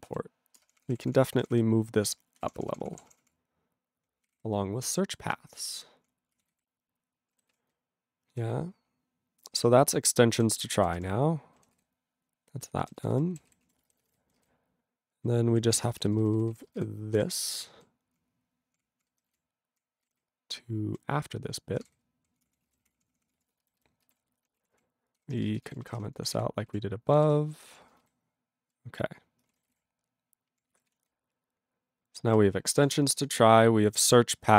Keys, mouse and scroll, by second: 0.1 ctrl+n, 0.6 ctrl+space, 0.6 ctrl+p, 0.8 ctrl+p, 0.9-1.5 ctrl+p, 2.4 ctrl+w, 2.4 ctrl+p, 2.6 ctrl+p, 2.7 ctrl+p, 2.8 ctrl+p, 2.9 ctrl+p, 3.2 ctrl+p, 4.3 ctrl+o, 4.3 ctrl+y, 4.9 ctrl+y, 5.3 ctrl+space, 5.3-6.1 ctrl+p, 6.3 Tab, 6.5 ctrl+n, 7.6 ctrl+s, 7.7-8.4 ctrl+n, 9.7-10.4 ctrl+n, 10.5 ctrl+e, 10.8 ctrl+n, 11.0 ctrl+k, 11.5 ctrl+k, 11.9 ctrl+s, 12.8 ctrl+n, 12.9 ctrl+e, 13.0 ctrl+n, 13.1 ctrl+n, 13.5 ctrl+s, 13.6 ctrl+a, 13.8 ctrl+space, 13.8 ctrl+e, 13.9 ctrl+n, 14.0 ctrl+n, 14.2 ctrl+n, 14.4 ctrl+g, 14.5-15.2 ctrl+n, 15.5 ctrl+p, 15.7 ctrl+p, 15.7 ctrl+e, 15.8 ctrl+p, 15.9 ctrl+n, 16.1 ctrl+n, 16.2 ctrl+n, 16.3 ctrl+n, 16.5 ctrl+n, 16.7 ctrl+space, 16.8 ctrl+n, 17.2 ctrl+w, 17.4 ctrl+p, 17.6 ctrl+n, 18.1 ctrl+n, 18.2-18.8 ctrl+p, 19.0 ctrl+n, 19.3 scroll down 1, 19.3 ctrl+n, 19.9 ctrl+n, 20.0 ctrl+e, 20.2-21.0 ctrl+n, 21.8 ctrl+o, 21.9 ctrl+y, 22.4 ctrl+p, 22.4 Tab, 22.7 ctrl+a, 22.8 ctrl+k, 22.9 ctrl+p, 23.1 ctrl+p, 23.2 ctrl+p, 23.3 ctrl+e, 23.8 alt+b, 24.0 alt+b, 24.7 ctrl+k, 25.2 ctrl+/, 25.6 alt+f, 25.9 alt+b, 26.0 /, 26.4 ctrl+s, 26.7 ctrl+a, 27.1 ctrl+n, 27.2 ctrl+e, 27.2 ctrl+n, 27.7 ctrl+p, 28.1 ctrl+alt+b, 28.7 ctrl+alt+b, 29.4 ctrl+space, 29.5 ctrl+a, 29.7 ctrl+g, 29.7 ctrl+e, 29.9-30.6 ctrl+p, 30.9 ctrl+s, 31.1-32.3 ctrl+n, 32.8 ctrl+s, 33.6-34.1 scroll down 1, 34.1 click, 34.2 click.